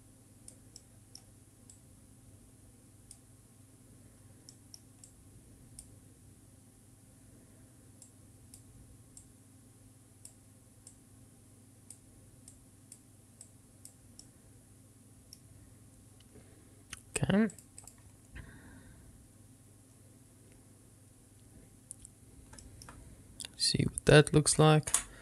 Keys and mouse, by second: 2.0-3.8 drag, 4.8 middle click, 5.3-8.0 drag, 8.3 click, 9.5-14.5 drag, 14.5-15.6 middle drag, 17.8 click.